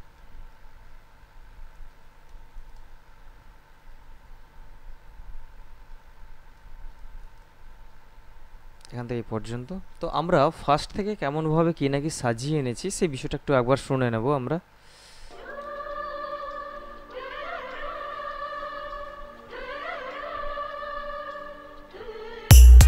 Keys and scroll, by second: 15.6 space.